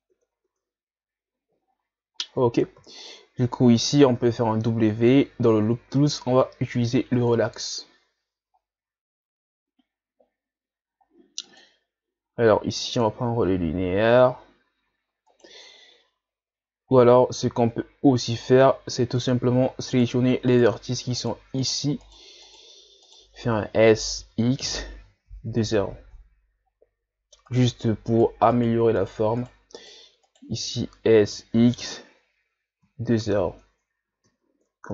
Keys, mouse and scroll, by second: 0.1 Tab, 0.5 Tab, 0.9-1.8 scroll up 6, 2.2 ctrl+scroll down 1, 3.0 alt+right click, 4.2 w, 11.4-14.5 drag, 15.3 alt+right click, 17.8-18.7 scroll down 1, 19.2 right click, 19.9 shift+right click, 20.5 shift+right click, 21.2 shift+right click, 21.6 shift+right click, 22.0 shift+right click, 22.5 shift+right click, 23.1 shift+right click, 24.2 s, 26.7 scroll up 1, 27.5 right click, 28.1 shift+right click, 28.6 shift+right click, 29.0 shift+right click, 29.4 shift+right click, 29.8 shift+right click, 30.3 shift+right click, 31.2 s, 33.6 Tab, 34.3 Tab.